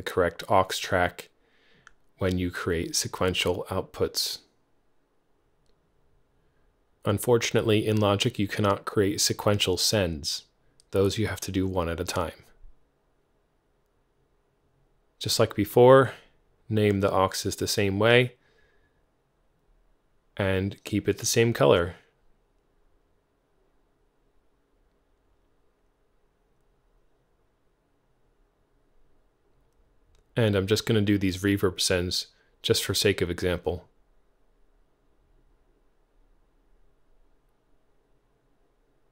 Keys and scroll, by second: 0.5 super+c, 2.9 super+v, 3.6 alt+Left, 4.5-5.7 typing, 6.1 Return, 10.4-16.4 typing, 12.9 Tab, 19.7 alt+c.